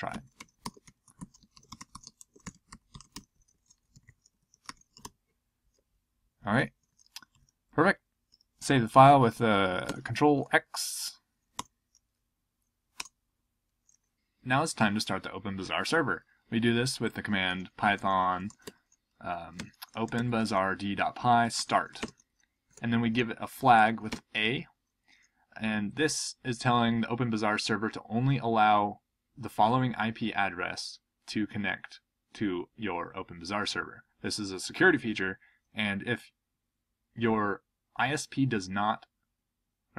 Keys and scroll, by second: 0.0-2.2 typing, 6.8 ctrl+p, 7.3 ctrl+n, 9.9 ctrl+x, 11.5 typing, 13.0 Return, 17.5-24.3 typing, 26.1 typing.